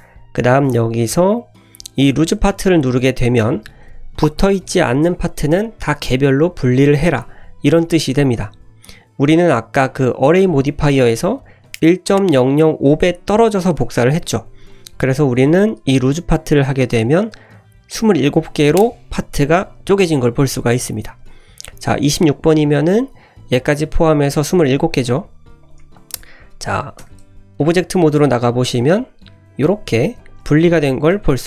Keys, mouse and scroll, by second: 15.4-18.7 drag, 19.6-19.9 scroll down 2, 20.8 scroll down 4, 21.5 scroll down 2, 22.7 scroll down 1, 25.6 click, 25.9-26.3 scroll up 1, 26.4-27.0 scroll down 2, 27.0 Tab, 27.5-27.8 scroll up 1, 28.8 click, 29.3 g, 29.9 ctrl+z, 30.1 click, 30.4 g, 30.9 ctrl+z.